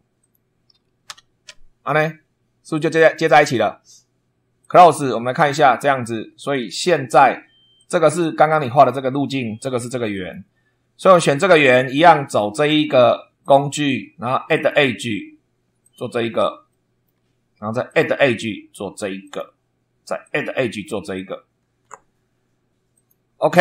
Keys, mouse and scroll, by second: 0.1 click, 1.0 c, 4.5 click, 6.6 click, 7.7 click, 8.7 click, 10.1 click, 13.3 click, 14.5 click, 15.7 click, 16.6 shift+middle click, 17.8 click, 19.1 click, 20.1 click, 21.1 click, 22.9 click.